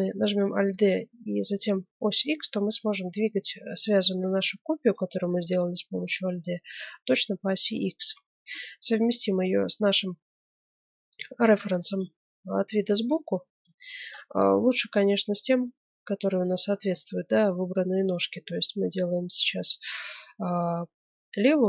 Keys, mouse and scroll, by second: 6.1-7.5 middle drag, 11.2-13.7 middle drag, 15.7-17.4 drag, 19.9-21.6 middle drag.